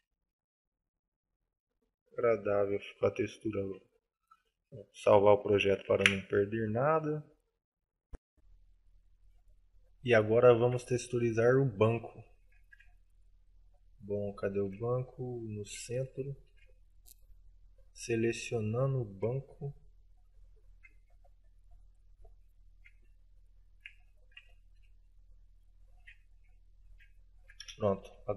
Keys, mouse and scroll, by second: 0.6 middle click, 3.8 shift+middle click, 5.8 ctrl+s, 8.5 F9, 10.5 middle click, 11.0 shift+middle click, 11.6 middle click, 12.3 shift+middle click, 12.8 scroll down 1, 13.0 shift+middle click, 14.0 shift+middle click, 14.6 shift+middle click, 15.0-15.5 scroll up 2, 15.5 middle click, 16.1 shift+middle click, 16.6 shift+scroll up 1, 17.3 right click, 18.2 right click, 18.6 right click, 19.5 Tab, 20.9 KP_Decimal, 21.5-21.9 scroll up 4, 22.0 middle click, 22.3 middle click, 23.5 alt+shift+right click, 24.1 alt+right click, 24.6 alt+shift+middle click, 24.9 alt+shift+middle click, 25.2 shift+middle click, 26.0 alt+shift+right click, 26.1 alt+shift+right click, 26.9 alt+shift+right click, 27.4 middle click.